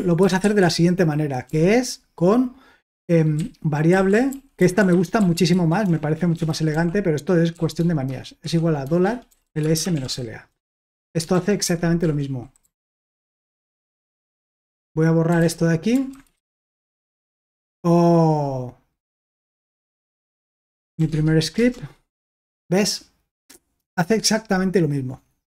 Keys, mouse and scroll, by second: 0.2 ctrl+w, 0.4 ctrl+w, 1.4 o, 3.3-16.9 typing, 11.6 Escape, 16.1 click, 19.2-21.4 typing, 21.5 Return.